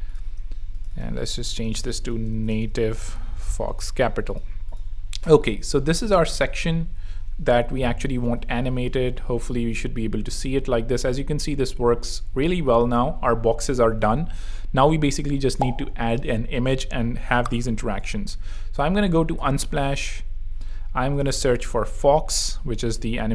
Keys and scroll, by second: 0.3 super+Escape, 2.1 shift+super+m, 2.3-3.6 typing, 8.3 super+3, 9.3 r, 14.3 super+2, 17.9 super+p, 19.1 Down, 19.3 Return, 21.1-22.3 typing.